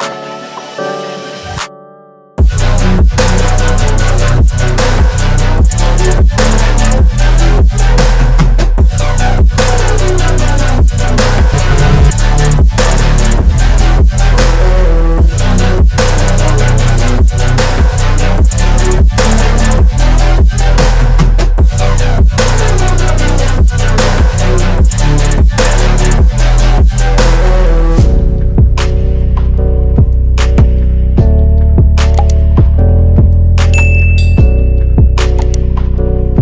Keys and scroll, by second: 6.5-8.1 typing, 20.0-23.8 typing, 24.6 Return.